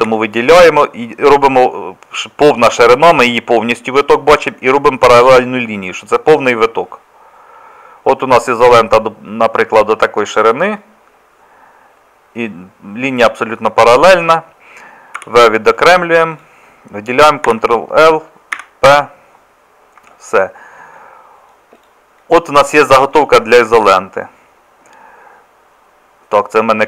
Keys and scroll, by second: 0.0 a, 15.2 v, 17.5 ctrl+l, 18.6 p, 20.0 Tab.